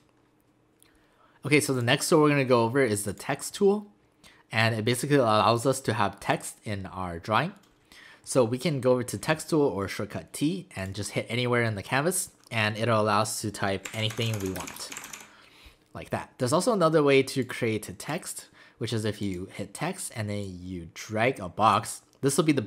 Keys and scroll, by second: 13.6-15.6 typing.